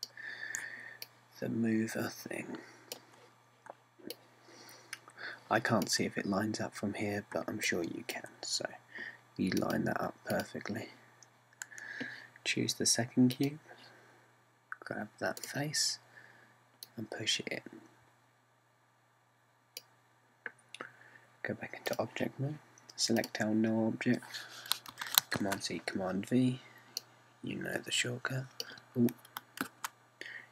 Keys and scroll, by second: 26.0 super+c, 26.4 super+v.